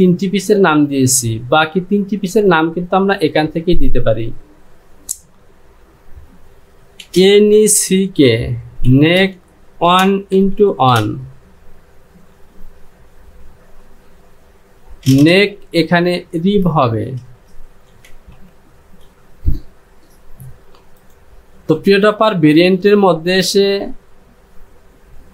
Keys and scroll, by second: 7.1 n, 7.5 e, 9.3 space, 9.9 KP_1, 10.4 x, 10.9 KP_1, 17.3 ctrl+space, 17.9 ctrl+r, 18.4 ctrl+i.